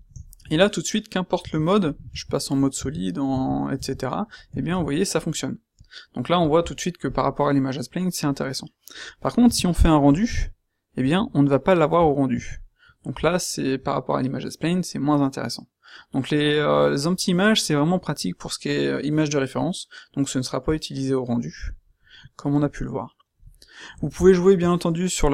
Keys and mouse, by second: 1.4-3.7 typing, 9.4 z, 12.3 z, 22.3 middle click, 23.7 middle click.